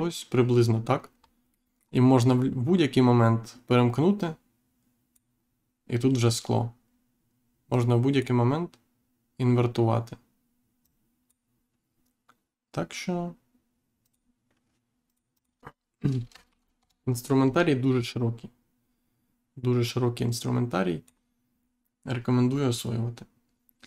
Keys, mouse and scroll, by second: 1.1 scroll down 1, 1.4 middle click, 4.1 click, 7.6 click, 10.8 click, 14.0 click, 15.0 click, 16.2 BackSpace, 16.4 5, 16.7 Return, 19.8 click.